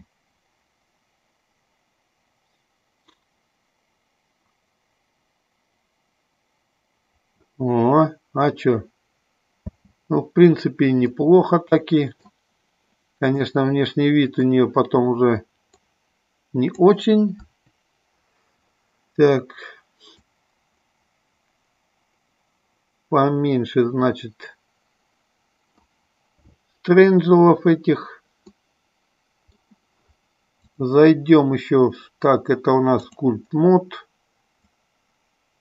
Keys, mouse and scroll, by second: 0.1 space, 10.0 space, 11.3-12.4 middle drag, 13.5-14.7 middle drag, 15.9 click, 17.6 Delete, 20.4-26.0 drag, 28.8-30.0 middle drag, 30.8-33.6 drag, 34.8-35.6 drag.